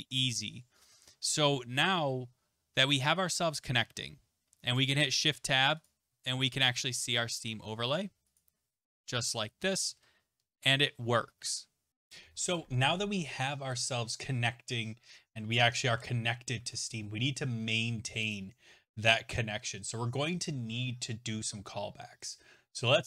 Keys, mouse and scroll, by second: 5.1 ctrl+shift+Tab, 5.8 click, 6.1 Tab, 8.4 click, 9.9 Tab, 11.9 right click, 11.9 click, 13.8 click, 15.9 Tab, 16.6 Tab, 18.3 click.